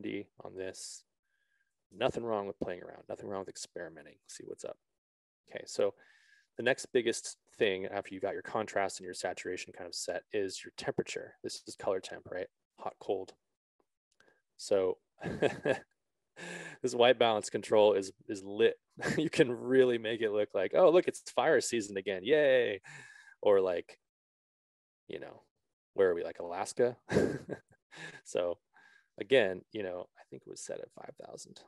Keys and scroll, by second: 2.1 Return, 2.6 Return, 31.2 5, 31.4 0.